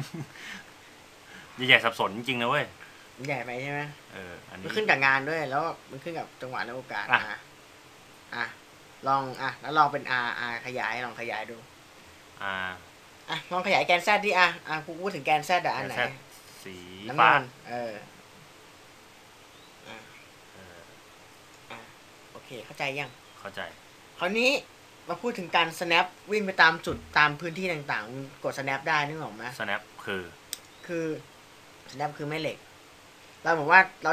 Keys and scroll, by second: 11.4 r.